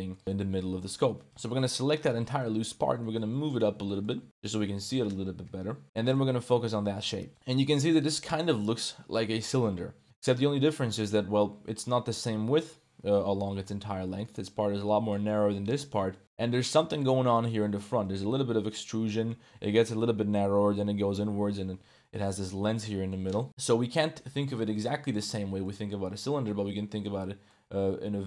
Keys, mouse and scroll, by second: 0.8 middle click, 1.2 a, 1.4 a, 2.0 l, 2.8 g, 3.8 shift+click, 4.2 ctrl+s, 4.2 click, 5.4 KP_Decimal, 6.0 click, 6.2 Tab, 6.4-7.0 drag, 7.0-8.5 middle drag, 9.1-10.2 middle drag, 10.2 ctrl+s, 10.3-10.9 middle drag, 14.0 middle click, 15.7-16.2 shift+middle drag, 16.4 middle click, 16.7 ctrl+s, 17.6 middle click, 18.2 Tab, 18.9 2, 19.0 middle click, 22.1 middle click, 22.5 ctrl+s, 22.8-24.3 middle drag, 24.3 Tab, 24.6 middle click, 25.0 Tab, 25.6 middle click, 26.5 1, 27.1 2, 27.4-28.2 middle drag.